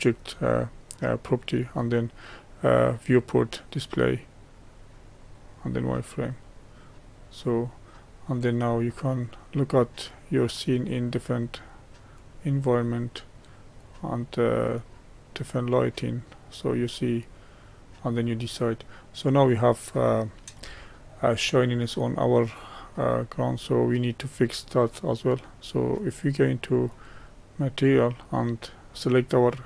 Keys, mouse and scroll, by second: 5.2 click, 6.2-8.6 middle drag, 8.6 click, 12.3-14.7 drag, 16.5-26.2 middle drag, 26.2 click, 27.0 click.